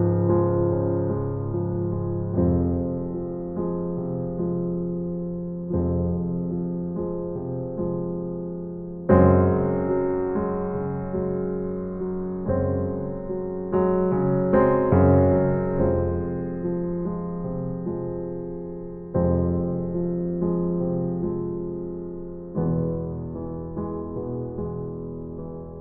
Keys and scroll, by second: 0.7 Right, 3.6 Right, 5.7 Right, 7.2 Right, 8.9 Right, 12.8 Right, 15.0 Right, 16.8 Right, 18.8 Right, 20.3 Right, 21.7 Right, 23.1 Right, 24.6 Right.